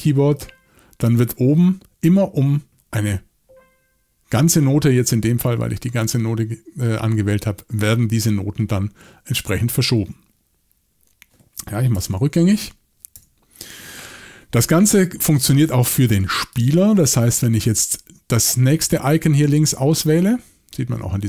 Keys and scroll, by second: 9.6 Escape, 11.9 super+z, 12.6 super+z, 13.1 super+z.